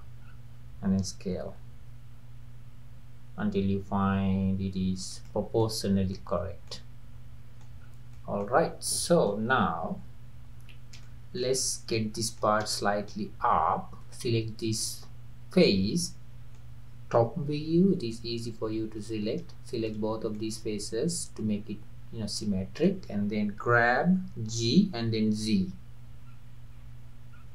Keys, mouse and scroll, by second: 0.2-0.6 scroll down 3, 1.5 s, 5.6 middle click, 6.4 scroll up 1, 6.7-7.9 middle drag, 7.9 scroll up 2, 8.2 middle click, 8.6-8.9 scroll down 2, 8.9 middle click, 9.5-10.6 scroll down 1, 10.6-11.1 scroll down 1, 11.1 shift+middle click, 11.6-11.9 scroll up 2, 11.9-14.0 middle drag, 14.0 click, 14.8-17.5 middle drag, 17.5 KP_7, 18.4-19.3 scroll down 1, 19.3-19.8 scroll down 1, 19.8 shift+click, 20.4-23.1 middle drag, 23.1-23.9 scroll down 1, 23.9-24.6 scroll down 1, 24.6 g.